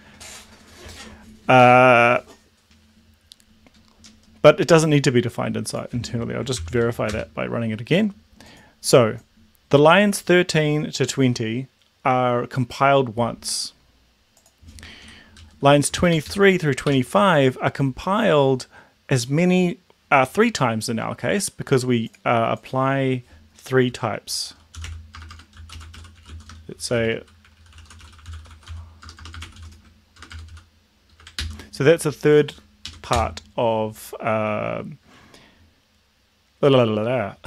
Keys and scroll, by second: 6.6 ctrl+l, 6.8 Up, 7.2 Return, 15.4 Down, 16.0 shift+Up, 16.3 shift+Left, 16.9 shift+Home, 24.7-31.2 typing, 31.4 ctrl+s, 32.9 Up, 33.3 Return.